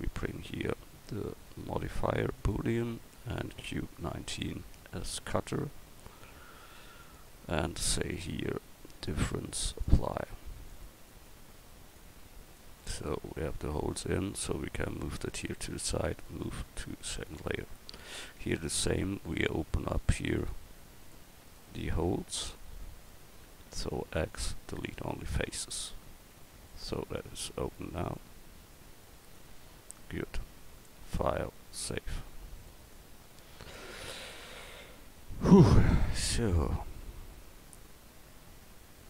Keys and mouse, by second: 11.1-12.6 middle drag, 15.9 m, 17.9 right click, 18.4 Tab, 24.0 x, 26.4 Tab.